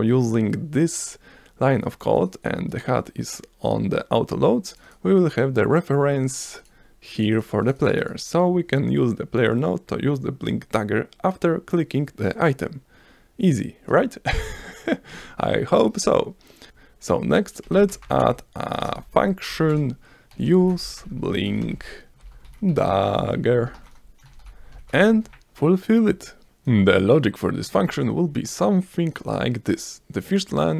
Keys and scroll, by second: 17.4-24.3 typing, 24.9 Return, 28.3 v.